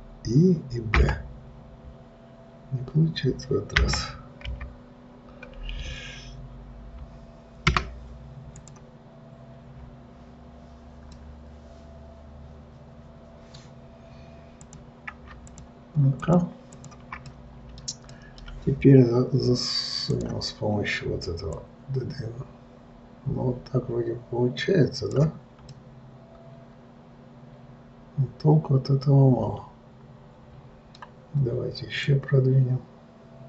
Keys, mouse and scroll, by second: 8.8 click, 11.5-14.5 middle drag, 15.0 click, 15.8 shift+click, 16.5 shift+click, 17.0 shift+click, 17.6-20.4 middle drag, 20.4-22.1 drag, 26.0-29.1 middle drag, 32.4 click.